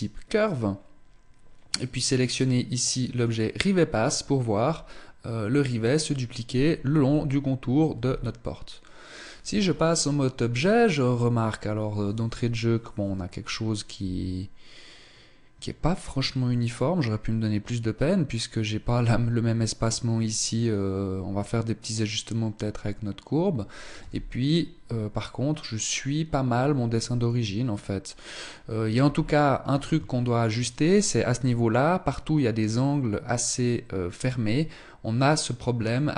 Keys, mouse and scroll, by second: 0.1 scroll down 5, 1.9 click, 3.7-4.3 scroll up 6, 7.5 z, 22.5-23.6 scroll down 1, 23.6 z, 28.3-29.5 scroll up 3, 28.3 z, 29.7 shift+middle click, 34.3-35.0 scroll down 1, 35.0-35.4 scroll down 2, 35.4 shift+middle click.